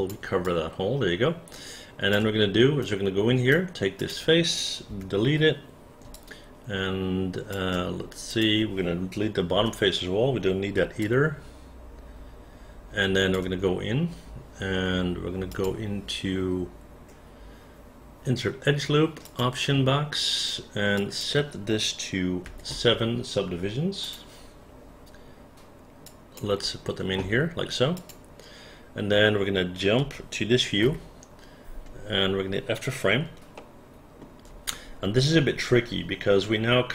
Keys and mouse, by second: 0.5-2.1 alt+drag, 2.8 right click, 4.0 click, 4.9 Delete, 6.2-7.5 alt+drag, 8.3 click, 9.6 Delete, 11.0-13.4 alt+drag, 20.9 click, 22.5 7, 26.1 click, 27.9 click, 30.0 space, 30.9 f, 33.6 alt+middle click.